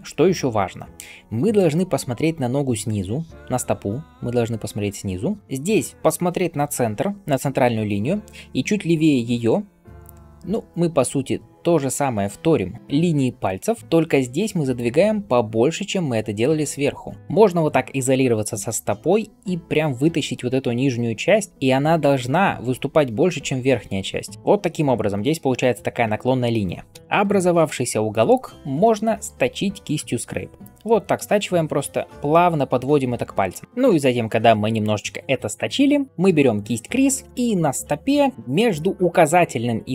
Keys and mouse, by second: 2.5-6.4 drag, 26.8 KP_Divide, 34.1 ctrl+click, 34.1 ctrl+right click.